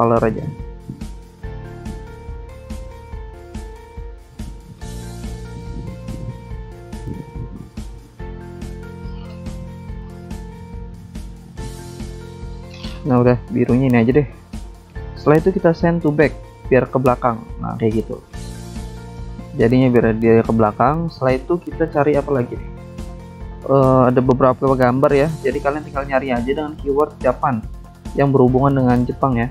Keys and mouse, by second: 0.6 click, 0.7 click, 0.8 double click, 2.3 ctrl+z, 3.0 click, 3.8 click, 4.8 click, 5.3 click, 5.9 click, 6.5 click, 6.7 double click, 7.2 click, 7.3 click, 8.1 double click, 9.5 click, 9.6 click, 9.8 click, 11.1 ctrl+z, 11.5 click, 15.3 click, 16.3 ctrl+z, 17.8 click, 18.0 click, 19.3 click, 21.1 click, 21.2 click, 21.7 click, 21.8 click, 23.2 click, 24.6 click, 24.7 click, 26.9 alt+Tab, 27.8 click, 27.9 click, 28.8 click, 28.8 click, 29.4 click.